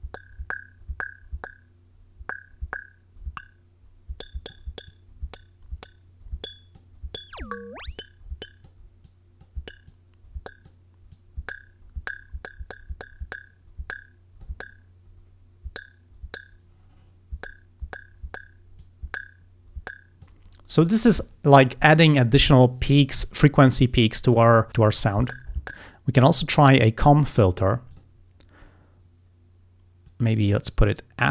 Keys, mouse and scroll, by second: 4.9-7.0 drag, 7.2-8.9 drag, 9.1 click, 9.9 click, 11.2-14.6 drag, 15.4 scroll down 1, 16.9 scroll up 1, 17.7 scroll up 1, 18.8-20.5 drag, 27.9 click, 30.1-31.3 drag.